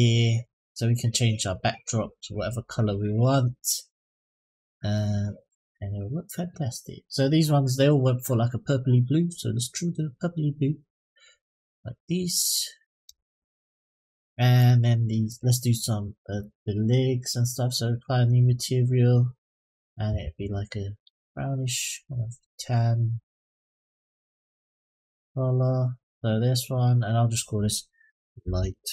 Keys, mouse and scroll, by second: 0.1 click, 1.2 click, 14.3 click, 15.0 click, 18.0 click, 19.3 click, 26.8-28.9 drag.